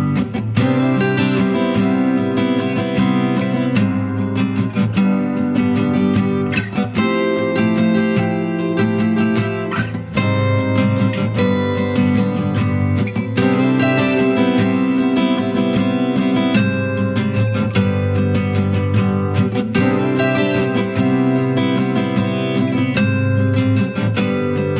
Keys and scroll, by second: 1.3-4.0 typing, 7.4 typing, 7.5 Return.